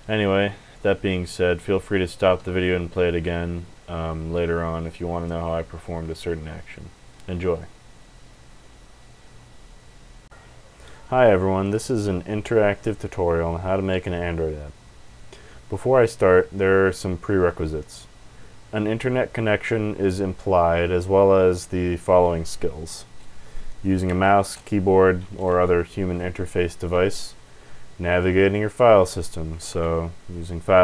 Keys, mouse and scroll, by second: 2.3 Escape, 23.7 click, 23.9 click, 24.0 BackSpace, 24.4 BackSpace, 25.3 s, 29.7 super+e.